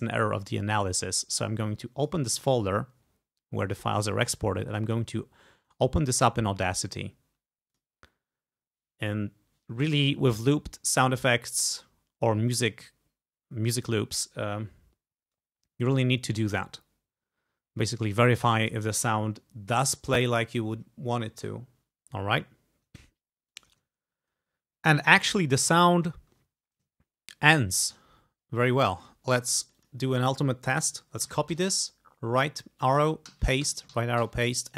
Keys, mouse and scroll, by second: 2.0 click, 4.7 click, 5.7 right click, 7.7 click, 22.1 ctrl+scroll down 2, 22.6 ctrl+scroll down 2, 23.6 click, 23.9-24.6 ctrl+scroll up 5, 25.1 ctrl+click, 27.1 ctrl+scroll up 2, 27.9-28.2 ctrl+scroll up 2, 28.2-29.1 ctrl+scroll down 2, 29.7 click, 31.3 ctrl+c, 31.6 ctrl+Right, 33.3 ctrl+v, 33.7 ctrl+Right, 34.0 ctrl+v, 34.3 ctrl+Right.